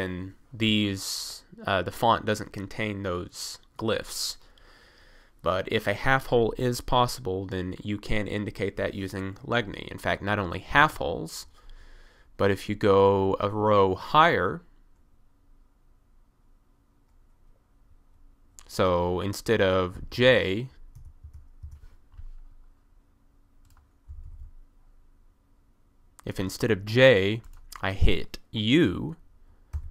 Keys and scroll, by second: 10.8 1, 20.1-21.3 typing, 24.1 typing, 29.8 u.